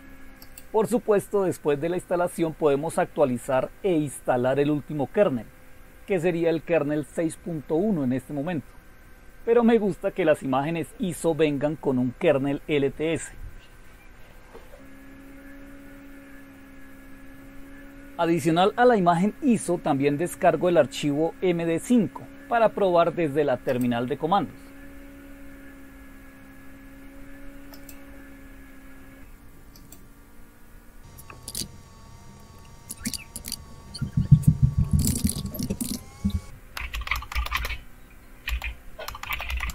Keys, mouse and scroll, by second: 0.4 click, 16.9-17.8 scroll up 2, 17.8-18.7 scroll down 2, 19.8-20.6 scroll down 2, 23.7 click, 27.7 click, 29.7 click, 31.5 shift+super+q, 32.3 click, 33.0 super+Return, 33.6 super+e, 34.2 scroll up 1, 34.4 scroll down 1, 34.8-39.7 typing, 34.8 click.